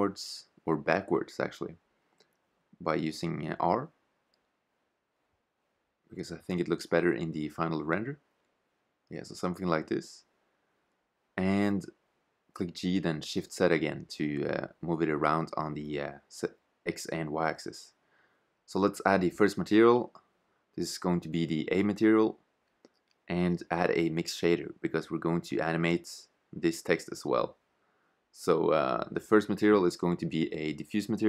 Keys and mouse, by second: 1.6 r, 3.7 middle click, 5.4 middle click, 6.8 KP_0, 7.9 shift+z, 10.3 g, 17.8-20.8 drag, 22.7-24.3 drag, 29.4 click.